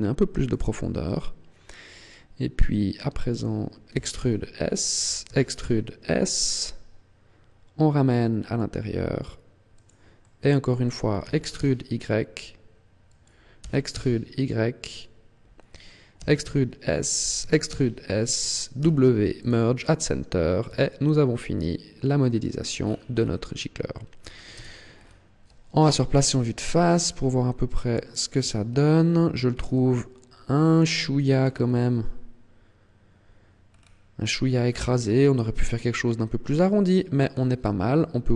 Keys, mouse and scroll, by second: 0.4 click, 0.6 middle click, 3.8 e, 5.1 e, 9.8 click, 10.0 middle click, 11.0 e, 13.0 click, 13.4 e, 14.8 click, 16.0 e, 17.1 click, 17.3 e, 18.6 click, 18.6 w, 20.6 a, 20.9 middle click, 22.6-24.0 scroll down 10, 23.7-24.4 scroll up 5, 24.4 Tab, 24.8 scroll down 2, 25.6 KP_1, 26.4-26.8 scroll down 2, 27.0-27.6 scroll up 7, 27.9 shift+middle click, 28.4-29.0 scroll up 1, 29.6 Tab, 31.4 scroll up 2, 33.6 scroll down 4, 34.8-35.7 scroll down 2, 35.7 middle click, 35.7 scroll down 2, 36.3-36.7 scroll down 2, 37.1 scroll up 2.